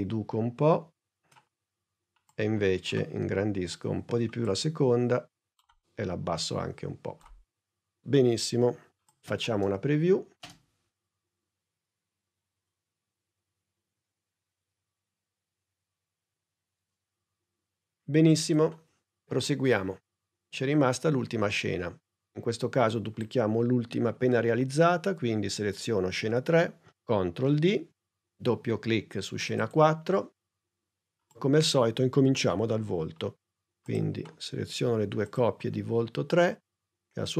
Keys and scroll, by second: 10.3 space, 27.3 super+d.